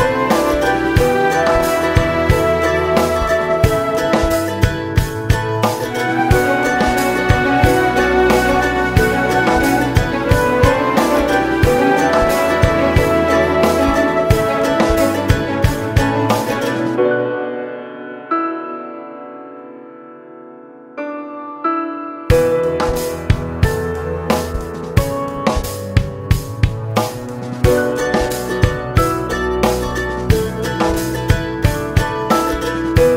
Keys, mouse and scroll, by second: 5.6 Tab, 6.0 Tab, 7.2 Tab, 7.3 click, 7.7 l, 8.4-12.2 drag, 9.0 Tab, 9.2 Tab, 9.6 Tab, 15.5 ctrl+shift+click, 18.9 click, 21.4 a, 21.9 g, 22.5 right click, 22.6 o, 23.2 g, 23.9 right click, 24.4 click, 24.8 g, 25.2 right click, 25.5 g, 28.0 click, 28.2 ctrl+m, 30.4 click, 30.8 o, 31.2 s, 31.8 click, 31.8 g.